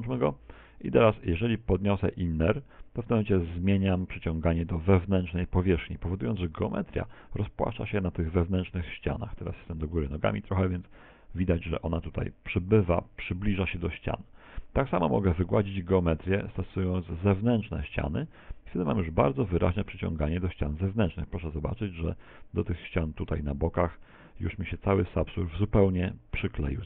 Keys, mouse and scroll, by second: 11.9 click, 16.1 middle click, 19.7 middle click, 20.1 scroll down 4, 20.2 middle click, 20.5 middle click, 20.8 scroll up 4, 20.9 shift+middle click, 21.1 middle click, 21.4 middle click, 22.3 click, 23.7 click, 25.2 middle click, 25.6 middle click, 25.8 scroll down 4, 25.9 middle click.